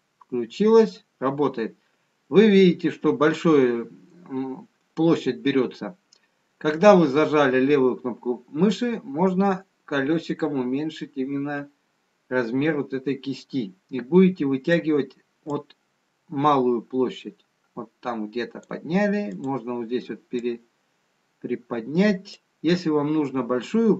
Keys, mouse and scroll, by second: 16.8 click, 21.0 click.